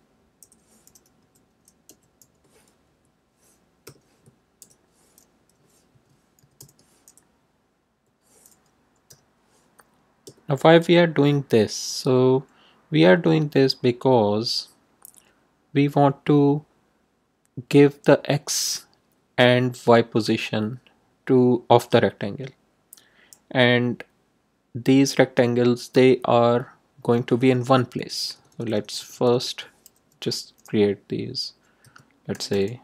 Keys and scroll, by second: 0.3 Left, 1.1 d, 1.8 ,, 2.1 i, 2.8 Right, 3.8 =, 6.1-7.0 typing, 9.0 i, 10.2 BackSpace, 27.9 BackSpace, 31.8 2, 32.3 0.